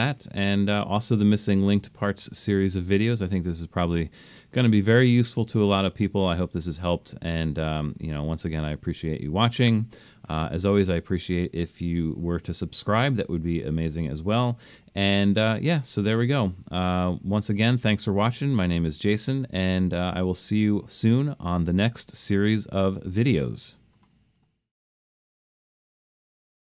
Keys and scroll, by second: 22.3 typing.